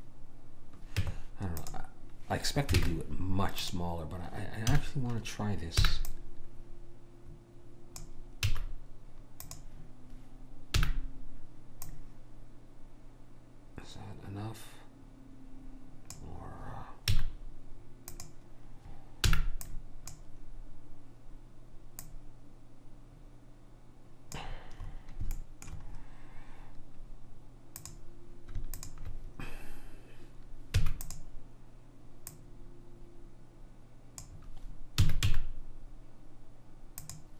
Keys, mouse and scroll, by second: 1.1 Tab, 2.9 ctrl+Tab, 4.8 a, 5.8 b, 8.5 x, 10.9 b, 17.2 x, 19.4 b, 22.1 click, 24.9-27.9 middle drag, 27.9 click, 31.0 e, 32.4 click, 35.1 s.